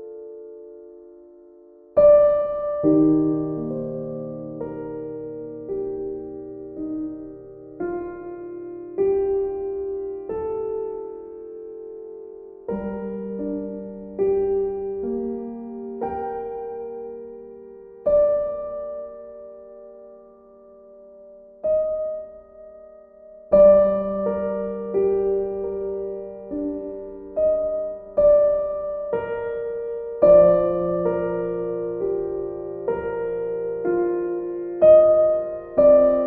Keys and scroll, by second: 4.6 b.